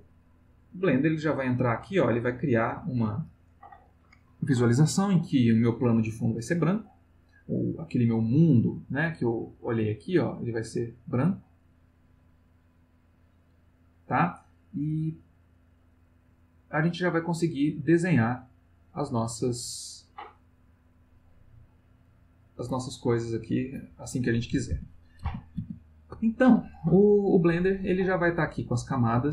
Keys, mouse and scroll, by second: 1.7-2.8 ctrl+middle drag, 9.2 click, 10.8 click, 11.7-13.5 drag, 18.0 click, 19.3 click, 21.0 click, 22.0-23.6 drag, 24.7 ctrl+z.